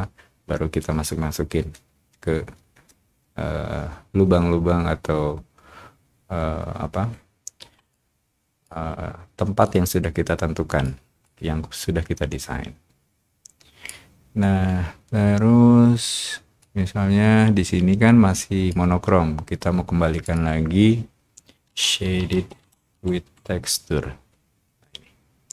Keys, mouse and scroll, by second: 7.6 o, 7.9 click, 8.4 o, 9.6-10.8 drag, 11.2-12.2 drag, 12.4-13.8 drag, 16.0 middle click, 16.5-18.6 drag, 20.2 click, 22.0-23.6 typing.